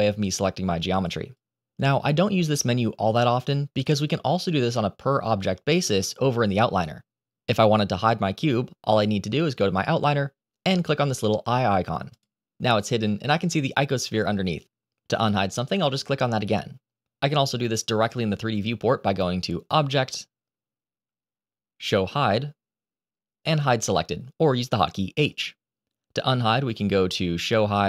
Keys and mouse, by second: 0.1 click, 1.2 click, 2.4-6.2 drag, 6.5-7.5 middle drag, 12.0 click, 15.7 click, 19.6-25.3 drag, 26.6-27.8 drag.